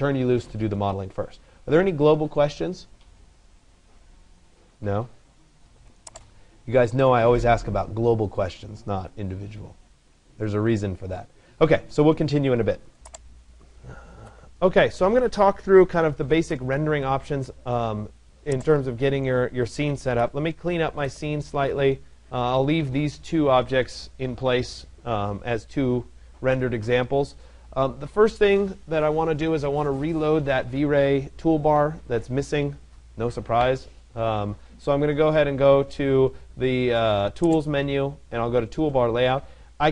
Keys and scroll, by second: 19.7 Delete.